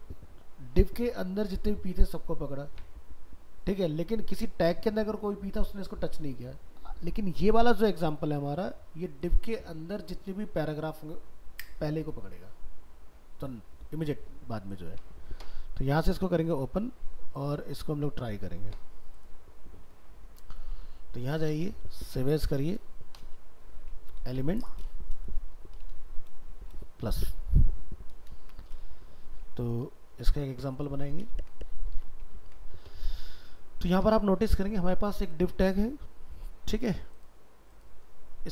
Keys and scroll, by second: 17.9 ctrl+Tab, 21.8 alt+秄, 30.1 ctrl+a, 30.5 ctrl+c, 31.0 ctrl+a.